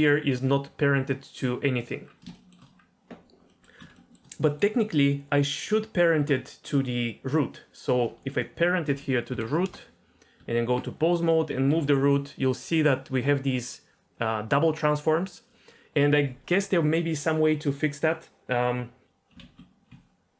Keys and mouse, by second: 2.3 shift+middle drag, 3.5 middle click, 3.9 shift+middle drag, 4.5 middle click, 5.6 Tab, 9.3 ctrl+p, 10.4 Tab, 11.7 g, 12.3 click, 19.0 g, 19.4 ctrl+z.